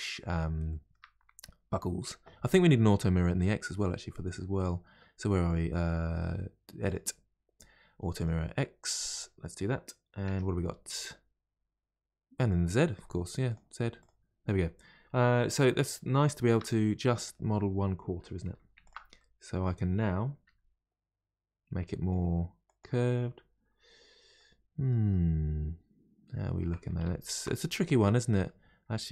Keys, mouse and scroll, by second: 0.0-0.6 scroll up 2, 0.7-3.7 shift+middle drag, 6.9 click, 8.2 click, 9.1 click, 10.3 Tab, 13.5 click, 14.0 click, 16.2-18.4 shift+middle drag, 18.4 2, 18.8 alt+click, 19.2-20.5 middle drag, 20.5 g, 24.4-27.1 middle drag, 27.1 ctrl+z, 27.7-29.1 middle drag.